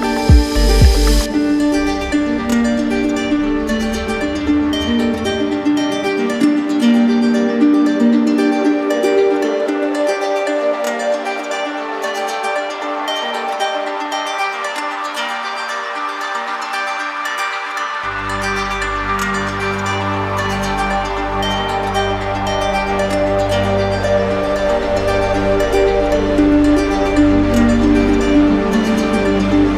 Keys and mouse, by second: 0.9 click, 9.7 shift+click, 10.2 click, 11.4 alt+click, 12.0 ctrl+z, 12.9 alt+click, 13.8 ctrl+z, 15.0 alt+click, 17.6 shift+click, 18.2 z, 19.5 click, 22.1 click, 22.3 click, 24.7 click, 24.9 ctrl+z, 26.4 right click, 27.6 click.